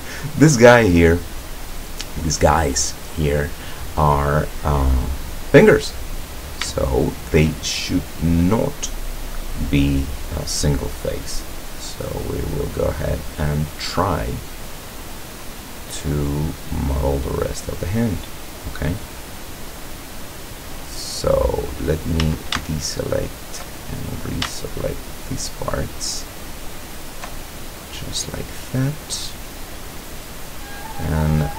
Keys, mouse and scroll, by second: 6.3-6.7 scroll up 1, 6.8-7.6 shift+middle drag, 11.5-11.8 scroll down 1, 11.9-16.7 middle drag, 18.9-20.1 middle drag, 22.3 a, 22.8 alt+shift+right click, 24.9 alt+shift+right click, 25.9 alt+shift+right click, 26.9 alt+shift+right click, 27.5 alt+shift+scroll down 3, 27.9-30.7 drag, 31.0 click.